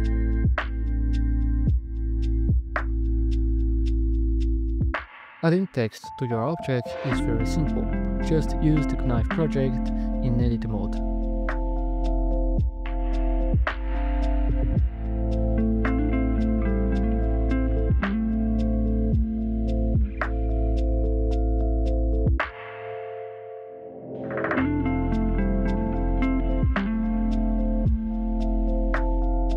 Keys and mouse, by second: 3.5-4.0 drag, 5.0 click, 6.9 right click, 7.2 Tab, 9.0 click, 10.5-12.0 drag, 13.0 middle click, 15.1 Tab, 16.8 right click, 17.2 Tab, 18.2 shift+right click, 20.6 shift+right click, 27.4 e.